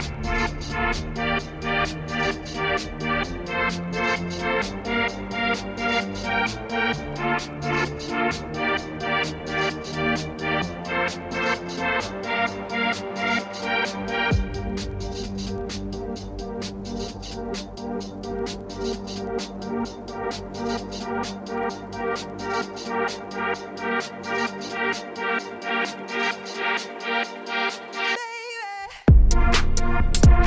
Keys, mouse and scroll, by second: 0.0 click, 0.1 3, 0.2 click, 0.8 2, 0.8 click, 1.1 click, 1.3 f, 2.1 middle click, 2.9 1, 3.0 click, 3.6 shift+click, 3.8 j, 4.1 click, 4.2 ctrl+x, 4.6 scroll down 1, 4.8 Tab, 5.0 middle click, 5.4 scroll up 2, 5.6-6.8 shift+middle drag, 7.9-9.1 shift+drag, 9.1 ctrl+1, 9.5 right click, 10.3 shift+middle click, 11.1 scroll down 1, 11.3 middle click, 12.6 KP_Divide, 12.9 middle click, 13.1-13.4 scroll down 2, 13.4 ctrl+scroll up 1, 13.5 ctrl+2, 13.7-14.9 middle drag, 15.1 click, 15.5 KP_Divide, 15.6 Tab, 15.8 scroll down 2, 16.0 middle click, 16.1 2, 16.3 click, 16.7 3, 16.7 click, 17.2 shift+click, 17.3 x, 17.9 click, 18.3-19.0 f, 19.4 Tab, 19.8-20.2 scroll down 1, 20.2 KP_Divide, 20.6 shift+click, 21.0 ctrl+l, 25.7 click, 26.1 click, 26.7 click, 27.2 click, 27.7-29.0 shift+middle drag, 29.0-30.3 drag.